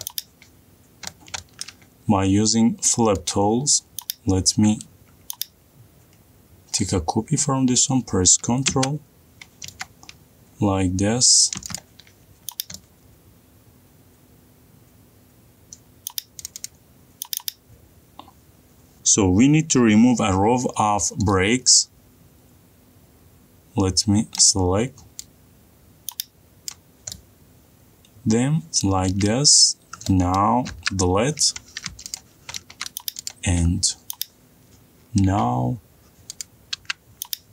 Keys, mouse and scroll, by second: 0.6 click, 1.2 middle click, 1.3 middle click, 1.5 middle click, 1.5 middle click, 1.9 middle click, 2.2 middle click, 2.4 shift+middle click, 2.7 middle click, 4.1 click, 7.6 click, 12.2 middle click, 12.9-13.3 scroll, 13.3 middle click, 13.7 middle click, 14.9 middle click, 16.2 click, 17.3 click, 17.5 click, 25.3 middle click, 27.6 click, 29.7 middle click, 29.7 middle click, 30.2 middle click, 30.4 scroll down 3, 30.4 scroll up 3, 31.3 middle click, 31.3 scroll up 1, 31.6 Delete, 32.2-32.8 scroll down 6, 33.1 click, 33.8 scroll down 1, 34.0-35.7 scroll, 34.2 click, 36.1 m.